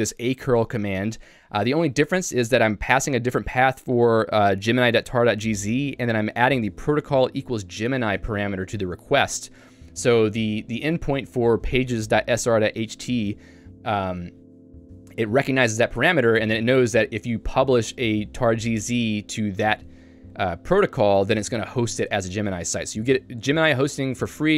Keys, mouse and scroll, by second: 0.8 Escape, 0.9-4.0 typing, 5.5-6.5 l, 11.0 Escape, 11.5-12.6 h.